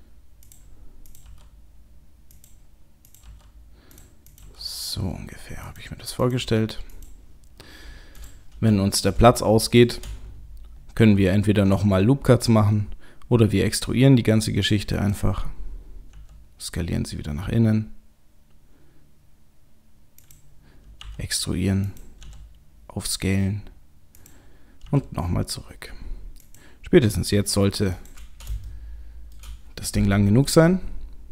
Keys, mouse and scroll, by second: 1.1 click, 1.3 g, 3.0 click, 3.2 g, 4.3 click, 4.4 g, 6.2 click, 6.4 g, 8.1 click, 9.0 click, 9.7 shift+click, 11.0 e, 16.1 s, 21.0 e, 22.2 s, 24.9 e, 27.3 s, 28.7 shift+middle click, 30.5 g.